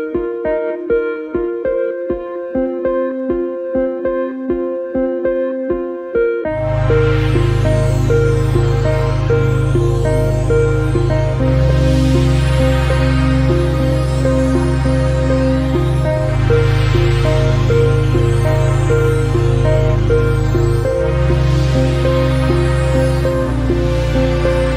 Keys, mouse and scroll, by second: 1.7-3.6 shift+middle drag, 3.6-4.5 scroll up 2, 5.8 Tab, 10.9 Tab, 11.8 click, 14.0 Tab, 18.8 shift+s, 20.9 Tab, 23.6-24.7 drag.